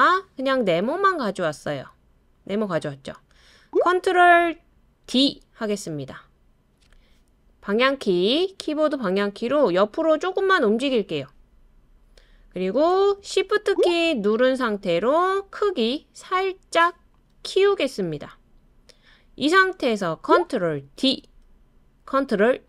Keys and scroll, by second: 5.1 super+d, 7.9-8.7 Right, 21.0 super+d.